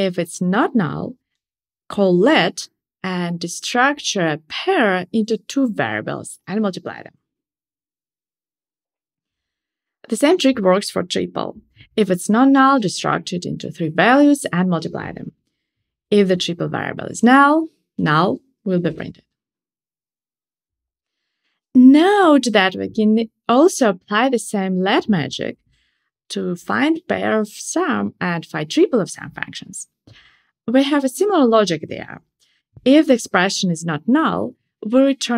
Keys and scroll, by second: 10.2 Tab, 12.2 Tab.